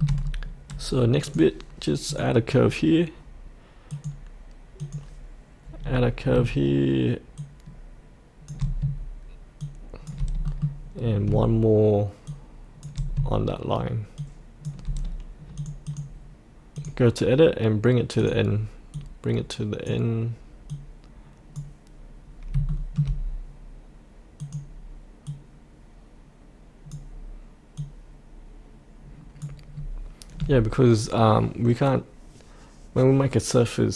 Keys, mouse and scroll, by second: 0.2-0.7 scroll down 1, 1.2-3.2 drag, 5.8 scroll down 1, 7.4 shift+click, 9.6 shift+click, 10.4 middle click, 11.0 scroll down 1, 12.2 shift+click, 14.2 shift+click, 15.5-22.4 drag, 22.4 scroll up 1, 22.7 shift+middle click, 24.4-29.5 drag, 29.7-33.9 scroll up 1.